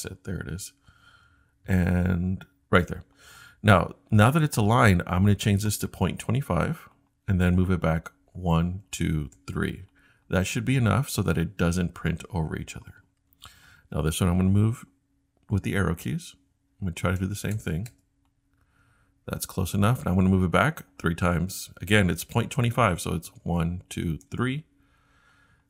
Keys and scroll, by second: 1.6 Tab, 2.2 Tab, 8.3 Left, 8.8 Left, 9.3 Left, 14.5-16.2 typing, 19.6 Left, 23.4 Right, 23.8 Right, 24.2 Right.